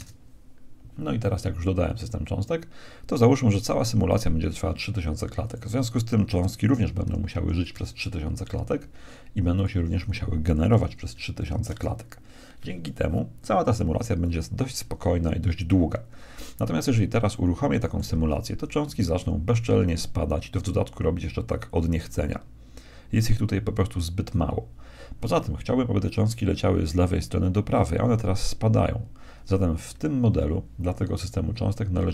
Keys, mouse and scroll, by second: 0.0 Return, 5.4-7.2 drag, 7.2 0, 9.5-11.2 drag, 11.2 0, 17.3-19.2 middle drag, 18.2 alt+a, 30.0 Escape, 31.4-32.1 middle drag.